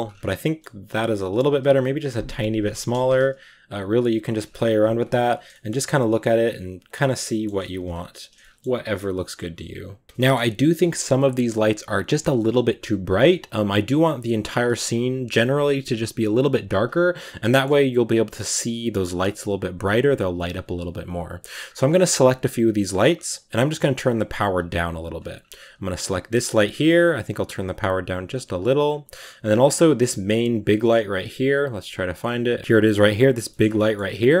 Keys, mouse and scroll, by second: 0.3 shift+middle click, 0.7-1.1 scroll up 2, 1.1 right drag, 1.5 shift+right click, 1.9 s, 2.8 g, 4.2 a, 4.3-4.7 scroll down 6, 4.7 ctrl+s, 5.4 shift+middle drag, 5.6-6.7 scroll up 2, 6.7 click, 7.1-10.4 shift+middle drag, 10.4-11.3 scroll down 1, 11.3-17.2 scroll down 1, 17.2 scroll down 1, 17.3-18.9 shift+middle drag, 18.9 scroll up 1, 20.8-21.5 right drag, 21.6 scroll down 1, 21.8 g, 23.2-25.2 drag, 25.2 scroll up 1, 25.9 right click, 26.4 g, 27.5-29.4 drag, 29.4 a, 29.6 a.